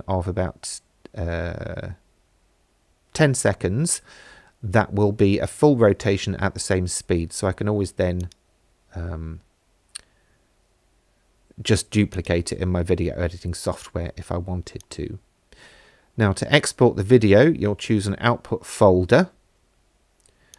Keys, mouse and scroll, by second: 5.7 space, 8.2 click, 12.1 click, 14.8 click.